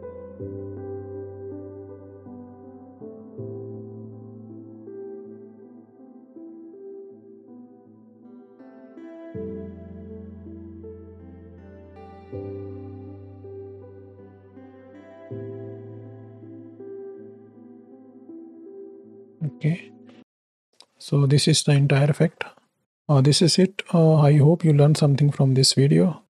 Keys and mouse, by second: 0.2 space, 1.6 space, 2.0 space, 3.1 space, 4.4 click, 7.5-9.6 drag, 10.9-12.1 drag, 13.9 space, 14.8 space, 15.4 space, 17.6 space, 18.3 space, 18.9 space, 20.1 click, 20.1 right click, 24.9 click, 24.9 right click, 25.6 middle click.